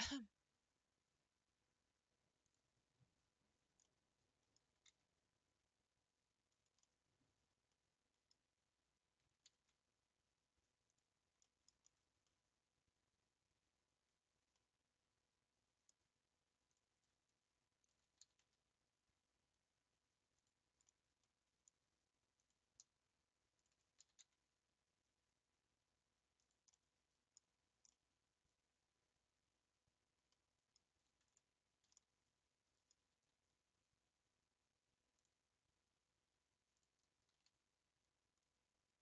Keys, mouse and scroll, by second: 0.2 scroll down 4, 2.4 click, 3.9 middle click, 4.7 s, 6.9-8.6 middle drag, 8.6-9.2 scroll up 1, 9.2 s, 11.4-16.7 middle drag, 16.7 click, 17.8 shift+click, 18.3 s, 20.8-22.4 middle drag, 22.4 click, 23.6 shift+click, 24.0 s, 26.7 middle click, 27.4 scroll down 2, 27.9-33.1 middle drag, 33.1 a, 35.1 click, 36.7 click, 37.3 g, 37.4 g.